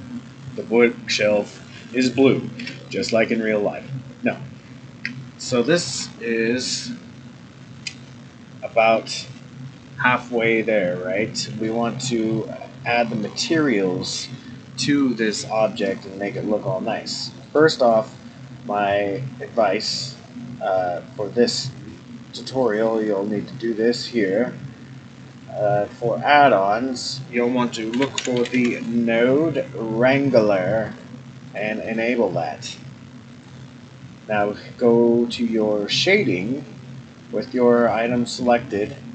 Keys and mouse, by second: 2.6 Tab, 5.4-5.8 shift+middle drag, 11.6-12.1 middle drag, 12.9-13.2 middle drag, 17.5-22.8 drag.